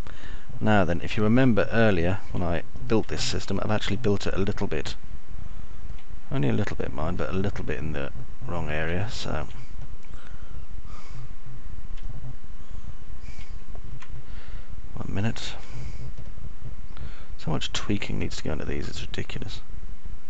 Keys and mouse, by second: 0.0-3.0 alt+middle drag, 3.1 middle click, 3.5 alt+middle click, 4.5 alt+middle click, 5.5-7.3 alt+middle drag, 9.0-10.3 alt+middle drag, 10.5 middle click, 13.5-15.0 alt+middle drag, 17.3-19.3 alt+middle drag, 20.1 click.